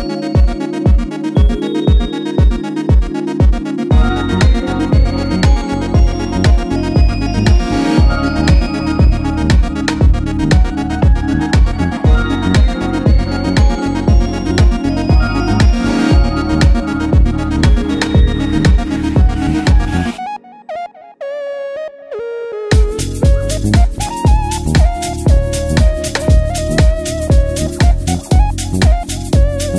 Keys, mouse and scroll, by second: 1.3 click, 2.0 click, 3.4 click, 5.5-7.1 shift+drag, 18.8 z, 19.4-20.0 drag, 28.1-29.7 drag.